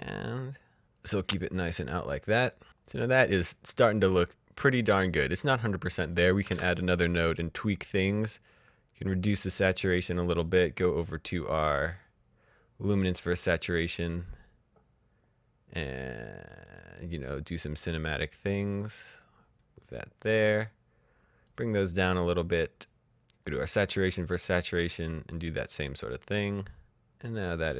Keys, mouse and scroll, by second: 0.8 click, 2.9-4.8 scroll up 1, 4.8 click, 6.4 alt+s, 9.0 click, 11.7 click, 13.3 click, 14.1 click, 23.2 click.